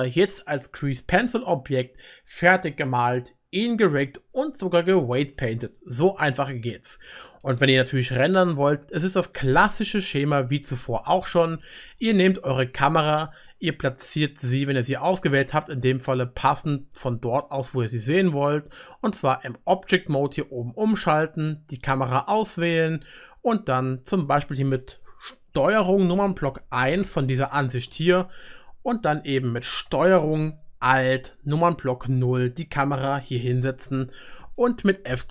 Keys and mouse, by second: 10.7-12.8 middle drag, 12.8-13.9 drag, 13.9-19.8 right drag, 14.1-14.5 drag, 14.1-14.5 middle drag, 15.3 click, 15.3 middle click, 20.4-22.0 drag, 20.4-27.4 middle drag, 20.4-21.9 right drag, 22.4 click, 26.4 ctrl+KP_1, 29.9 ctrl+click, 30.6 ctrl+alt+middle click, 32.0 ctrl+alt+KP_0, 32.0-33.2 ctrl+alt+middle drag, 34.6 middle click, 35.2 middle click.